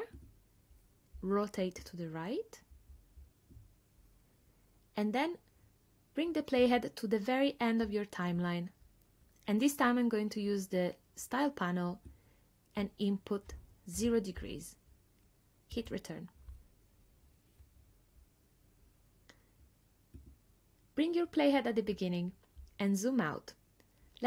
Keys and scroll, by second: 14.0 0, 15.8 Return.